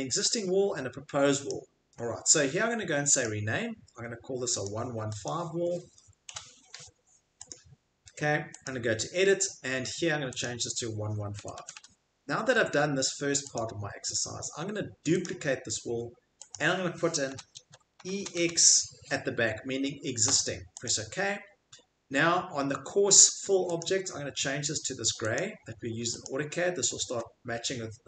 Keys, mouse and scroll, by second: 5.2 click, 6.2 5, 7.6 click, 8.7 click, 10.4 click, 11.4 typing, 13.6 click, 15.2 click, 16.5 click, 17.3 BackSpace, 18.0 shift+e, 18.4 shift+x, 20.8 click, 26.3 click.